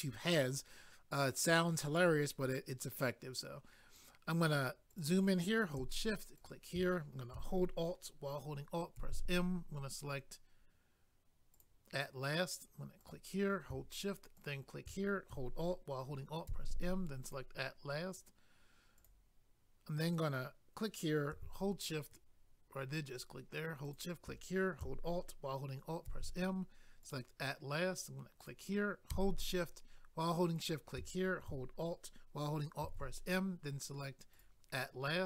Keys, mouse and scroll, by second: 3.7-4.9 scroll up 2, 4.9 click, 5.0 click, 6.4 shift+click, 6.5 shift+click, 9.0 alt+m, 11.5 click, 11.6 click, 13.0 click, 13.1 click, 14.3 shift+click, 14.4 shift+click, 16.5 alt+m, 17.2 click, 17.3 click, 19.0 click, 23.8 shift+click, 26.0 alt+m, 27.0 click, 28.4 click, 28.5 click, 30.5 shift+click, 30.7 shift+click, 32.8 alt+m, 34.3 click, 34.4 click.